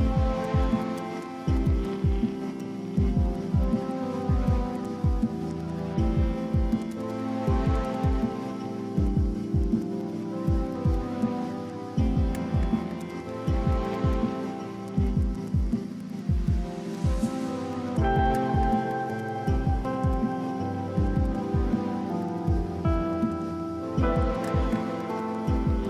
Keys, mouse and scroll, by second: 0.1 double click, 1.2-2.0 typing, 4.4 ctrl+click, 6.4 double click, 10.2 BackSpace, 13.0 ctrl+click, 22.5-24.6 typing.